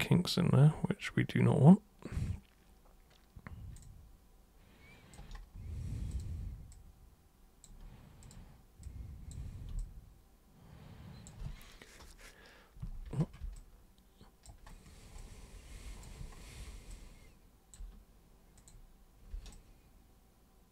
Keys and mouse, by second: 0.0-3.7 alt+super+drag, 3.8-5.1 alt+super+drag, 6.1 super+click, 6.7 super+click, 8.2 super+click, 8.8 super+click, 9.8-11.2 alt+super+drag, 13.5 alt+super+click, 15.2 alt+super+click, 16.9 alt+super+click, 18.6 super+click, 19.5 alt+super+click, 20.1 alt+super+click.